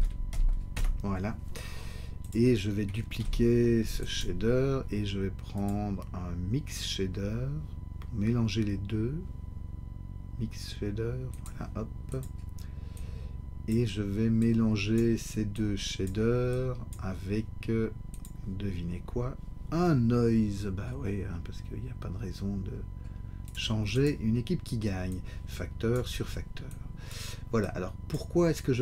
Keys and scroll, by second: 0.7 Return, 3.2 shift+d.